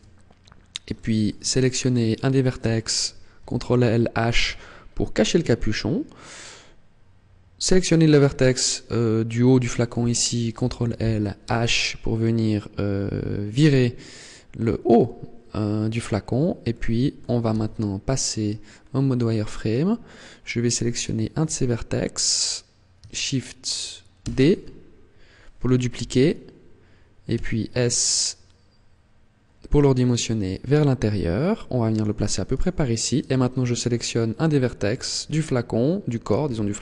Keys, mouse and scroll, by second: 0.2-0.5 scroll up 2, 0.8 shift+middle click, 2.0 right click, 3.3 ctrl+l, 4.2 h, 6.2 right click, 10.4 ctrl+l, 11.4 h, 16.6 shift+middle click, 17.4 z, 18.3-18.8 scroll up 3, 20.8 alt+right click, 24.1 shift+d, 32.0 click, 32.4 right click, 36.3 ctrl+l.